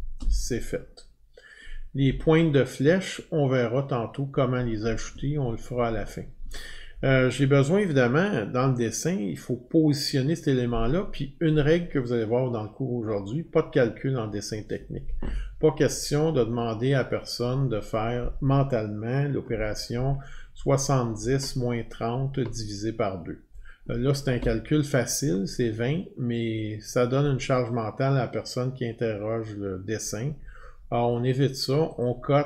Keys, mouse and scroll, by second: 0.0 scroll down 2, 32.0 click.